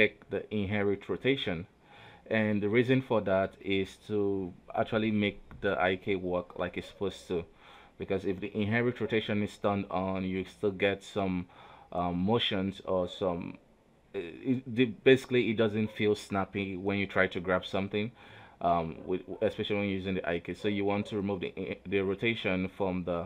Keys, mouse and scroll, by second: 1.1 r, 2.6 r, 3.6 right click, 7.0 click, 8.3 click, 9.2-10.9 drag, 12.2 a, 13.3 alt+r, 13.5 alt+g, 14.3 right click, 14.5 g, 18.3 r, 19.7 g, 21.6 right click, 22.4 click, 23.2 right click.